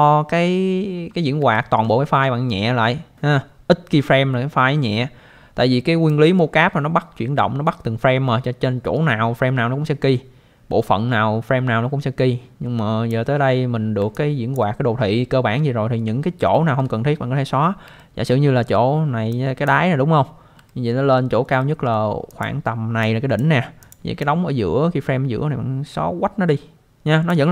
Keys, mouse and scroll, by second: 0.9-1.3 scroll down 1, 1.5 alt+middle click, 1.8 scroll down 1, 6.1 click, 14.1 alt+click, 16.5 alt+middle click, 18.0 alt+middle click, 19.3 click, 20.6 alt+middle click, 21.6 alt+middle click, 22.3 click, 23.0 click, 23.8 click, 24.2 click.